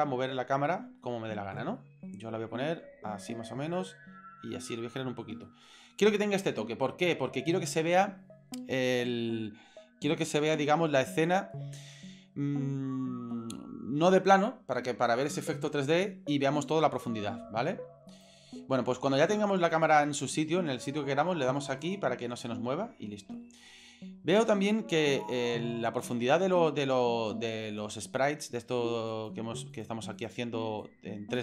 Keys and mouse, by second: 1.0-1.5 ctrl+middle drag, 1.8-2.1 shift+middle drag, 2.5 ctrl+middle click, 3.6-5.3 middle drag, 5.4 shift+middle click, 18.1 right click, 21.8 click, 22.4-24.4 middle drag, 26.4-28.5 middle drag, 29.1 right click, 29.7 shift+right click, 30.1 shift+right click, 30.8-31.4 drag.